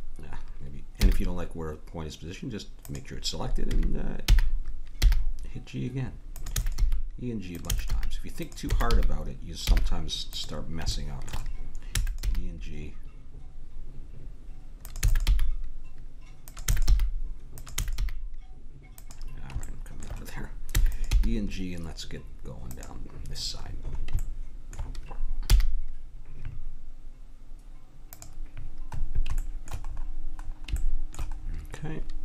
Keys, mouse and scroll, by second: 1.0 g, 3.6 e, 6.5-8.8 typing, 8.6-10.5 drag, 12.0 e, 12.3 g, 15.0 e, 15.3 g, 16.6 e, 16.9 g, 17.7 e, 18.0 g, 20.8 e, 21.1 g, 25.5 g, 29.0-30.8 middle drag, 31.4-32.2 middle drag.